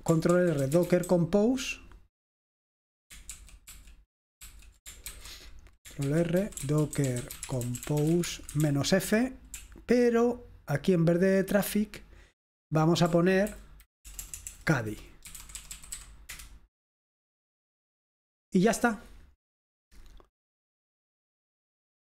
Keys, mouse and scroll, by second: 0.0-1.6 typing, 0.4 ctrl+r, 3.5 ctrl+r, 3.7 ctrl+r, 4.5 ctrl+r, 5.2 ctrl+c, 6.2 ctrl+r, 6.3-9.2 typing, 9.6-13.5 Right, 13.5 Left, 14.1-16.5 typing, 20.8 click.